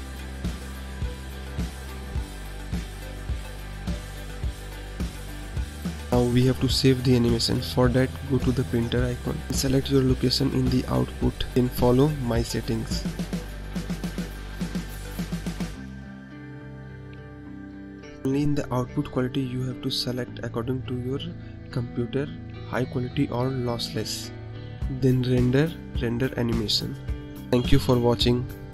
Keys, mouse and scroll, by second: 1.2 click, 5.6 click, 10.5 click, 13.7-14.8 scroll down 3, 14.8 click, 15.9 click, 16.5-17.4 scroll down 6, 17.4 click, 17.8-19.0 scroll down 6, 19.0-24.6 drag, 27.2-28.7 drag.